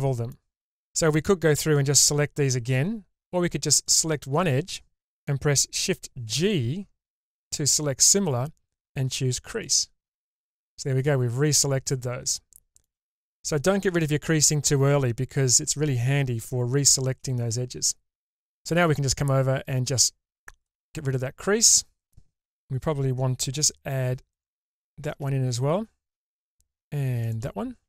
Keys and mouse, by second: 0.8 middle click, 6.3 shift+g, 10.7-12.0 middle drag, 12.3 shift+middle click, 19.6-20.6 drag.